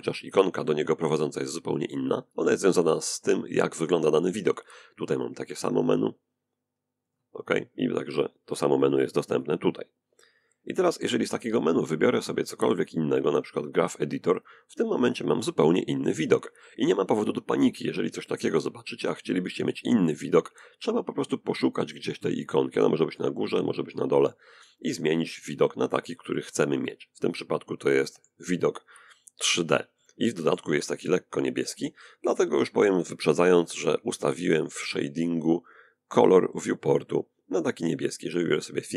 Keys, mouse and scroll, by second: 4.4 click, 6.3 click, 8.0 click, 11.6 click, 13.1 click, 23.2 click, 25.0 click, 26.0-29.1 middle drag, 29.2-31.2 middle drag, 33.8 click, 37.8 click.